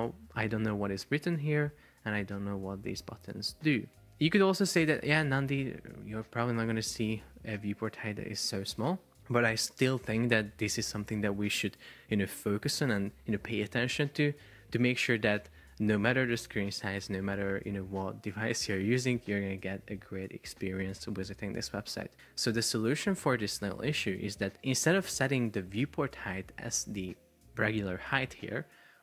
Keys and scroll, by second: 22.2 Escape.